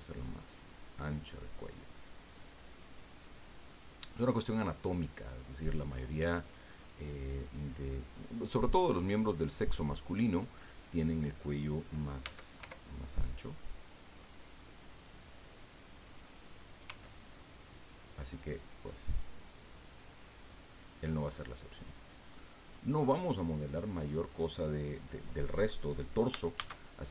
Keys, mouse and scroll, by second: 4.2 click, 4.6-11.6 middle drag, 12.2 s, 12.6 y, 13.9 click, 14.2-16.4 middle drag, 16.8 s, 17.7 click, 20.4-22.2 drag, 22.3 middle click, 23.1-23.7 scroll up 2, 26.5 shift+a.